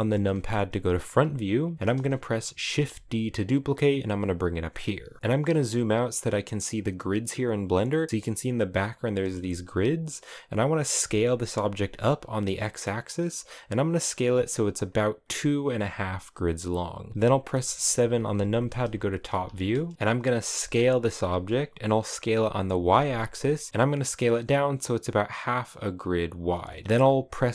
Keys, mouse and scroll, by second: 1.3 click, 2.3 shift+d, 5.2-8.1 scroll down 4, 10.6 s, 15.4 g, 17.5 KP_7, 18.7-19.9 shift+middle drag, 19.9 click, 20.3 s, 26.3-27.5 shift+middle drag.